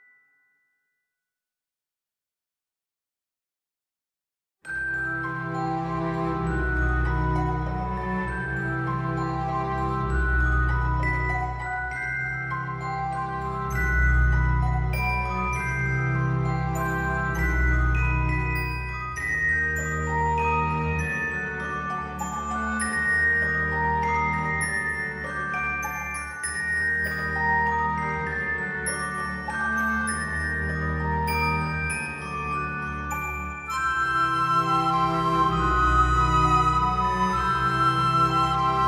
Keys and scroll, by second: 23.1 ctrl+z.